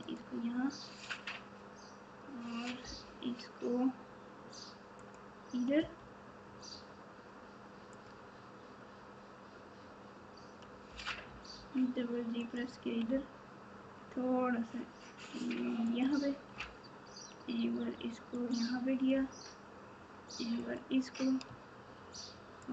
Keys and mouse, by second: 2.8 e, 10.8 g, 16.5 e, 22.6 shift+click.